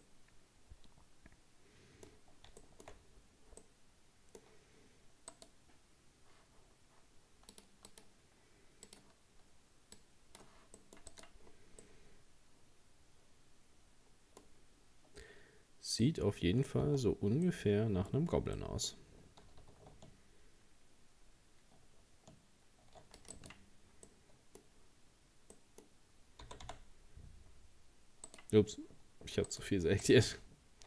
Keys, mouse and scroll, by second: 0.0-2.2 middle drag, 2.2-3.6 scroll up 8, 2.6 shift+middle click, 3.6-5.3 middle drag, 5.3 right click, 7.5-10.8 drag, 10.8 middle click, 11.2 right click, 11.4-11.8 scroll down 1, 11.8-14.4 middle drag, 14.4-15.7 scroll up 2, 16.0 middle click, 16.9 Tab, 17.5 middle click, 18.1 scroll up 2, 18.6-19.9 middle drag, 19.9 ctrl+r, 24.1-26.4 middle drag, 26.4 g, 29.5 right click, 30.0 right click.